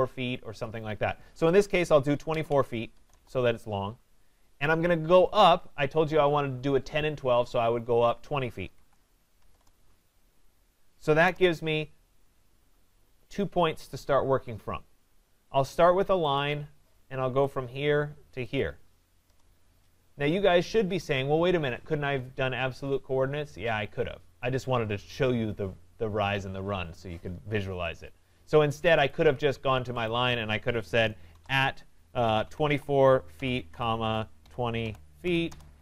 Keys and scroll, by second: 3.1 Return, 9.5 Return, 19.2 Return, 35.5 Return.